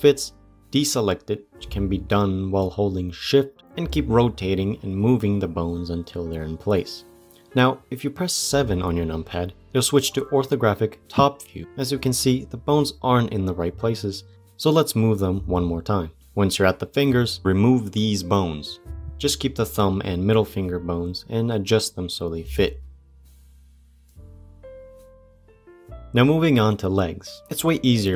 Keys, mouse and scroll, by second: 0.4 shift+click, 1.2 shift+click, 2.4 r, 3.8 g, 7.1 middle click, 7.7 KP_7, 8.4 scroll up 2, 8.7-10.6 shift+middle drag, 10.6 click, 12.2 g, 14.4 shift+middle click, 15.2 g, 16.1 shift+click, 18.5 Delete, 23.9 g, 27.0 c.